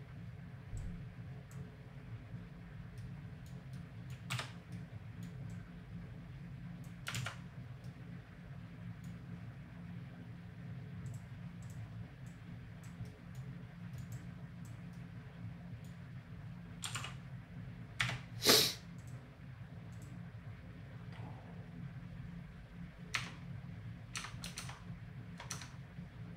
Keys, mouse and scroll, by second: 4.7 middle click, 5.5-7.2 drag, 7.2 ctrl+z, 7.6 middle click, 11.8-15.8 drag, 16.8 r, 19.0-22.0 drag, 23.1 Tab, 24.2 Tab, 25.5 Tab.